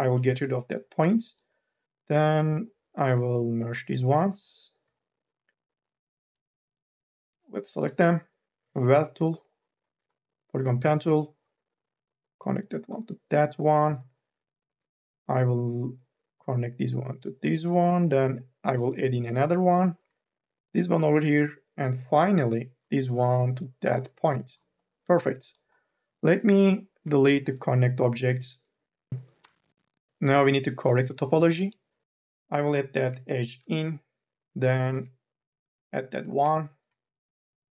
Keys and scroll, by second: 6.4 9, 8.4 m, 8.7 q, 29.2 Delete.